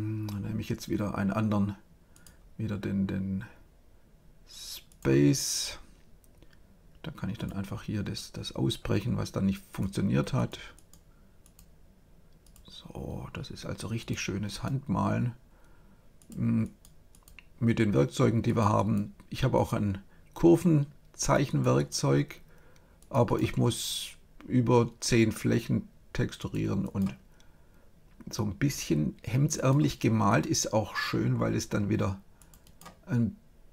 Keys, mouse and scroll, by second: 2.1-4.0 drag, 7.3-9.1 drag, 9.7-24.9 drag, 26.3-28.4 drag, 29.5-31.9 drag, 32.3-33.7 drag.